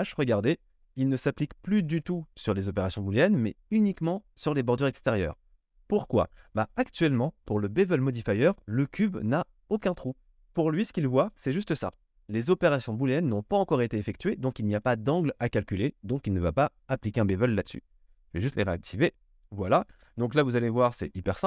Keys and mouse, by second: 11.3 click, 11.4 middle click, 11.7 click, 11.9-18.6 middle drag, 18.6 click, 18.7 middle click, 19.0 click, 19.1-21.2 middle drag, 21.2-21.4 drag.